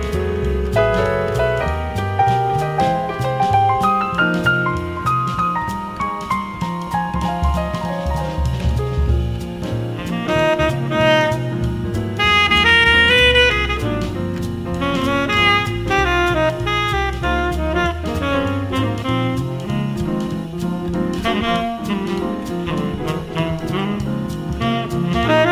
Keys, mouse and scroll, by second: 0.5 space, 6.0-9.3 drag, 10.2 t, 11.1-15.0 drag, 15.2 space, 19.5-21.9 right drag, 21.9-23.7 drag, 24.4-25.5 drag.